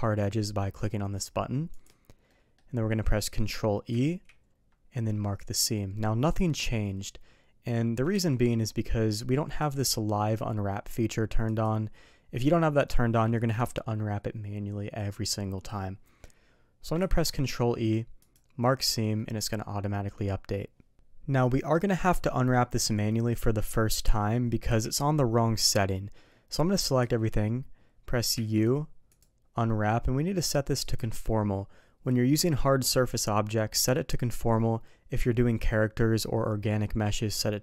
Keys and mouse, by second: 2.3 middle click, 3.9 ctrl+e, 8.1 ctrl+z, 9.6-11.8 drag, 17.0 ctrl+e, 19.1 middle click, 20.9 middle click, 24.7 a, 27.0 a, 28.3 u, 30.8-37.6 drag.